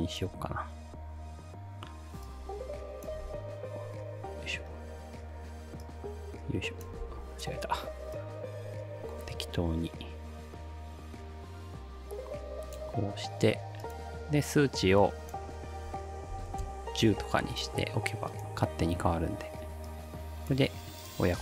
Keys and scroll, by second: 3.3 ctrl+z, 7.1 ctrl+z, 16.1-16.9 typing.